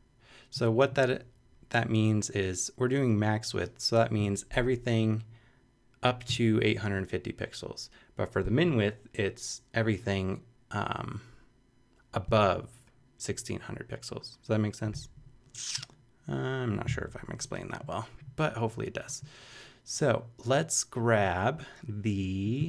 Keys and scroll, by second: 0.8 0.